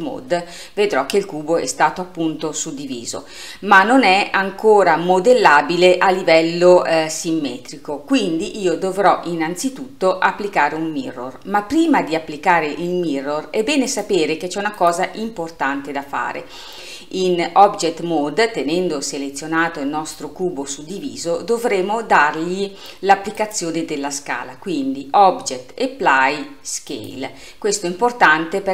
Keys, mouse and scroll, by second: 13.9-17.1 drag, 23.4-26.6 drag.